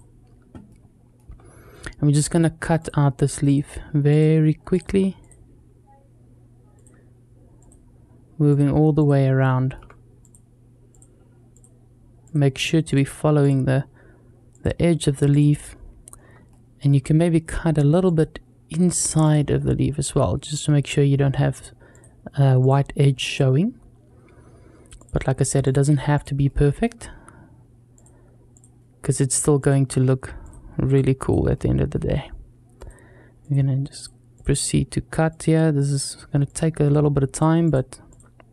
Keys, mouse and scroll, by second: 0.0-0.5 scroll down 2, 0.5 shift+middle click, 1.3-2.7 scroll up 1, 9.2 shift+middle click, 15.9-16.2 scroll up 2, 16.3 shift+middle click, 19.4 shift+middle click, 26.3 shift+middle click, 31.4 shift+middle click.